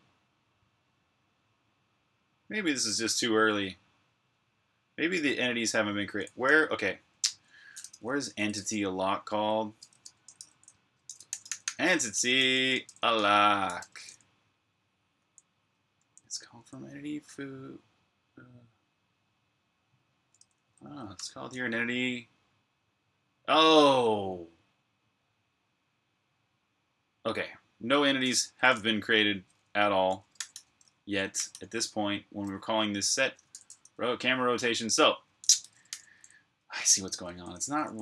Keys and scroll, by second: 6.3 super+Tab, 8.3 super+f, 9.8-13.6 typing, 10.3 shift+super+f, 15.0-16.4 typing, 20.2-21.0 typing, 30.0-31.2 typing, 33.1-38.0 typing.